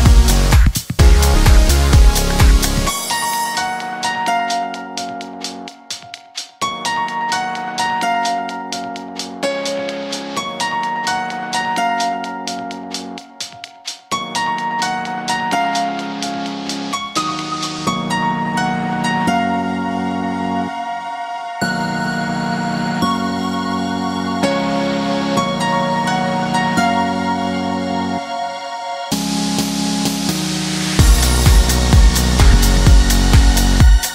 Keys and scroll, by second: 18.0 ctrl+c, 22.6 ctrl+v, 25.1 Delete.